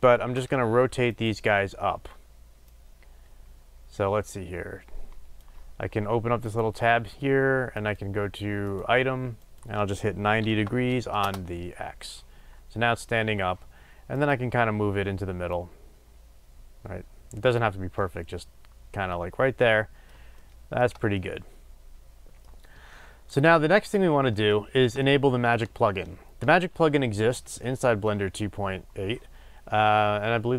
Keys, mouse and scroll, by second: 1.2 shift+space, 2.7-14.3 drag, 11.3 Return, 15.5-18.0 drag, 18.0-30.5 middle drag, 23.6-24.5 scroll up 2.